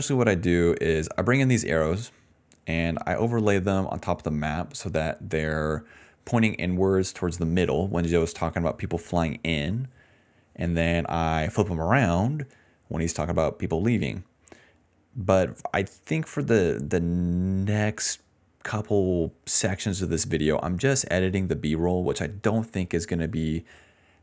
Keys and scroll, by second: 14.8-15.9 typing.